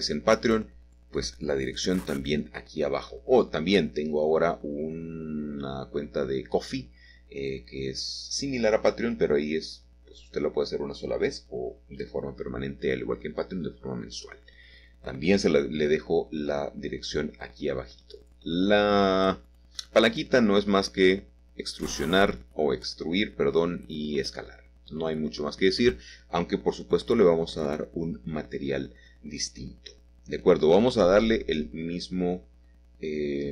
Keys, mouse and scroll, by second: 0.9 g, 3.5 click, 5.7-6.7 scroll up 1, 6.7 middle click, 11.9 e, 13.1-15.0 drag, 16.0-17.7 drag, 18.9 click, 19.9 click, 21.3 click, 27.3 i, 30.3-32.0 scroll up 1, 32.5-33.5 drag.